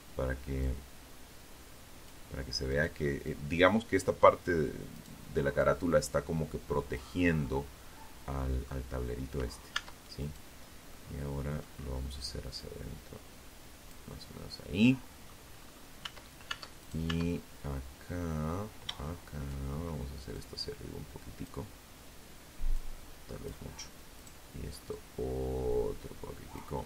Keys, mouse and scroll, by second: 0.8 right click, 1.4 click, 3.1 right click, 3.8-5.3 drag, 5.8-7.0 middle drag, 7.9 Tab, 8.4 right click, 9.1 middle click, 9.9 scroll down 1, 10.7-12.2 drag, 12.3-13.6 middle drag, 13.6-14.0 scroll up 2, 14.2 Tab, 15.0 right click, 15.5-17.8 middle drag, 18.5-19.8 drag, 20.9 click, 22.3 right click, 23.1-24.9 drag, 25.0 middle click, 26.7 right click.